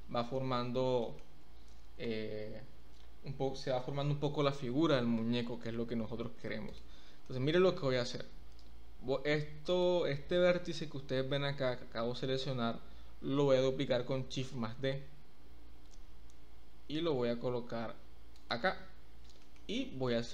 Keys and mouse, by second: 1.0 shift+middle click, 4.8 Tab, 7.2 shift+middle click, 9.6 click, 14.9 shift+d, 18.4 click, 19.5 shift+middle click, 20.1 shift+middle click.